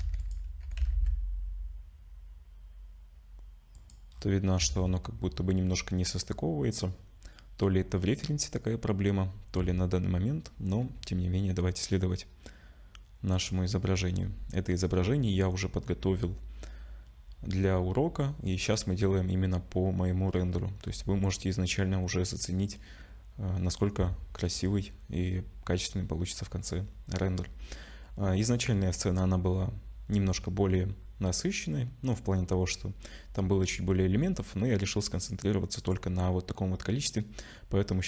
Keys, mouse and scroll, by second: 0.0 2, 0.2 click, 0.6 g, 4.1-5.2 scroll down 5, 4.6 Tab, 5.2-6.1 scroll up 2, 7.2-7.6 scroll up 1, 8.2-9.3 scroll up 1, 10.8 r, 14.2-18.1 scroll down 9, 20.4-20.8 scroll up 5, 20.8-23.6 scroll down 5, 26.2-26.6 scroll up 5, 27.4 scroll down 1, 27.4 scroll down 4, 29.7-30.7 scroll down 1.